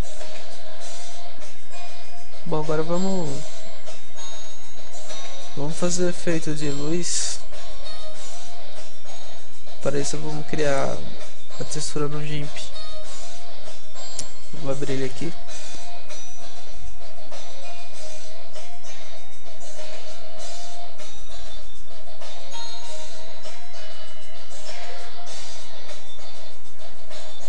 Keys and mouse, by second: 0.9-3.4 middle drag, 5.6 ctrl+s, 5.6 middle click.